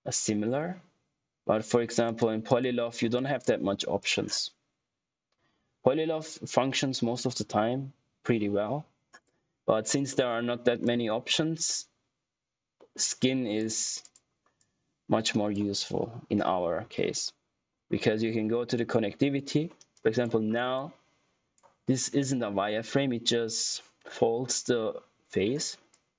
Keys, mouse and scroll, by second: 2.0 click, 9.5 click, 10.0 middle click, 10.4-10.8 scroll up 1, 10.8 click, 12.8 middle click, 13.5 click, 20.4 scroll up 1, 20.7 click, 26.1 click.